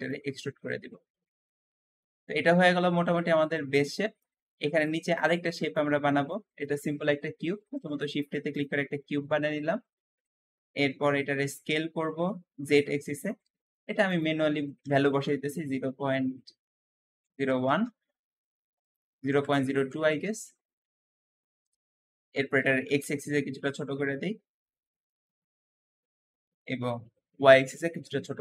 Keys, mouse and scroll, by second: 0.3-0.9 scroll down 3, 0.9 Tab, 1.4 scroll down 1, 1.6-4.6 middle drag, 4.6 shift+click, 5.0 shift+click, 5.6-7.3 shift+middle drag, 7.3 shift+a, 7.3 shift+a, 8.8-10.5 shift+middle drag, 10.5-11.3 scroll up 2, 11.0 s, 11.3 z, 11.4 z, 13.9-17.0 drag, 14.7 KP_0, 14.8 KP_0, 15.0 KP_Decimal, 16.9 KP_0, 17.0 KP_0, 17.2 KP_1, 17.3 KP_1, 17.5 Return, 17.6 Return, 18.7-21.1 drag, 19.2-19.8 typing, 20.1 Return, 21.1-22.5 middle drag, 22.5 s, 22.7 x, 22.8 x, 24.9-26.9 middle drag, 26.9 s, 27.4 y, 27.5 y.